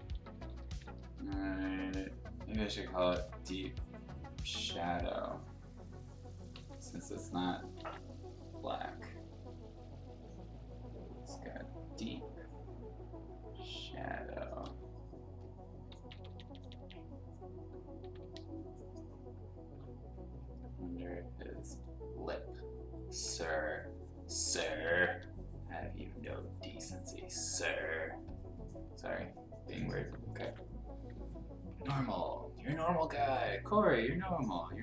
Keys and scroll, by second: 0.0-1.5 typing, 3.1 ctrl+z, 6.5 ctrl+z, 7.7 ctrl+z, 14.6 ctrl+z, 15.9 [, 16.3 [, 16.4 [, 16.6 [, 18.0 ], 18.2 ], 23.3 ], 24.7 ], 24.9 ], 25.1 ], 30.4 ctrl+z, 31.8 ctrl+z.